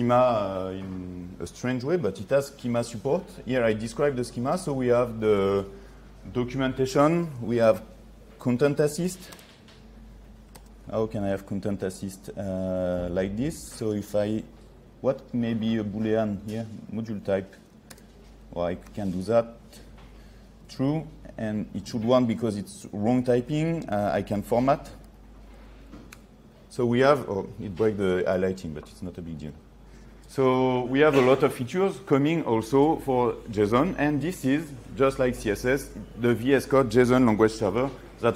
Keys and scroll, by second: 10.7 ctrl+space, 18.0 ctrl+space, 21.7 ctrl+a, 23.4 ctrl+s, 24.4 ctrl+3.